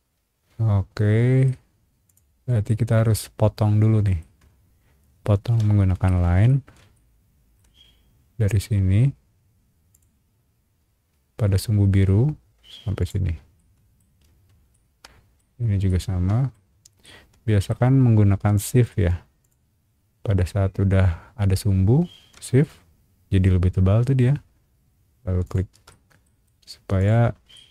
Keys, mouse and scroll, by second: 2.0 click, 2.3 scroll up 1, 2.7-4.2 middle drag, 4.4-4.8 scroll up 2, 5.5 l, 5.7 scroll up 1, 6.0 middle click, 6.9 shift+middle click, 9.9 shift+click, 13.0 click, 13.5 shift+middle click, 14.2-14.6 scroll down 2, 14.7 shift+middle click, 15.6 scroll up 1, 15.9 shift+middle click, 16.7 scroll up 1, 17.0 shift+middle click, 19.4 shift+click, 25.4 shift+click, 25.9 middle click, 26.4 scroll down 1, 26.6 space, 27.0 click, 27.2 scroll down 1, 27.5 shift+middle click.